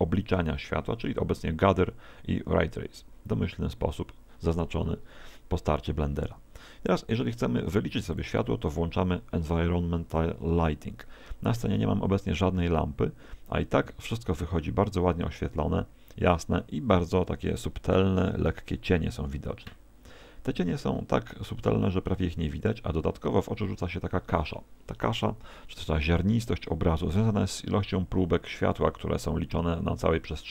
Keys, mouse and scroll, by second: 8.2 click.